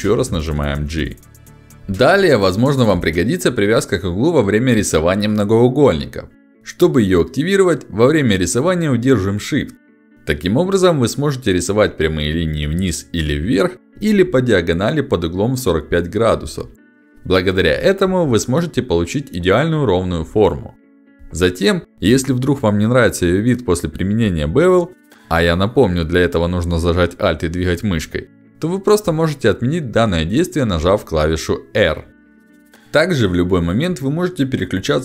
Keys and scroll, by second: 7.4 2, 30.3 r.